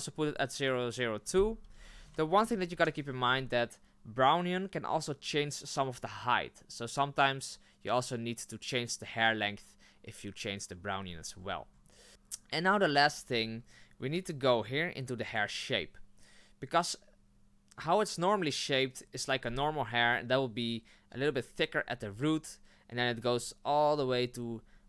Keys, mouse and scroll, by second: 11.0-12.1 scroll down 10, 12.1-12.4 scroll up 2, 13.0-13.4 scroll up 7.